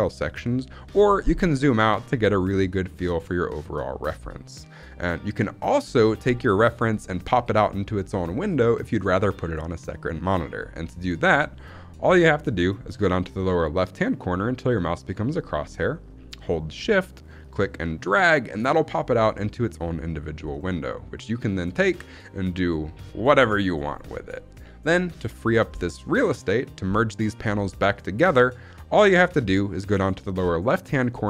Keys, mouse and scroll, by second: 0.8-1.4 scroll down 2, 1.4 middle click, 1.4 scroll down 1, 1.6-2.0 scroll up 3, 2.0 middle click, 2.5-3.9 scroll down 1, 17.3 shift+click, 21.7 shift+click.